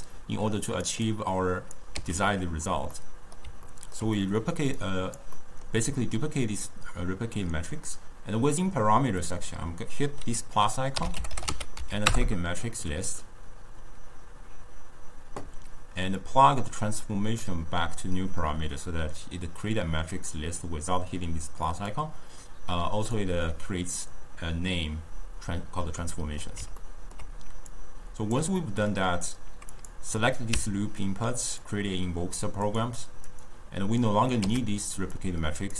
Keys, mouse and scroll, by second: 0.8 click, 1.1 click, 2.4 x, 3.0-4.8 middle drag, 4.8 click, 5.4-8.5 middle drag, 9.3-15.0 drag, 16.3 click, 22.0 drag, 26.0-27.8 middle drag, 27.8 click, 28.7-29.8 middle drag, 29.8 click, 30.6 w, 33.3 click, 34.8 x, 35.2 click.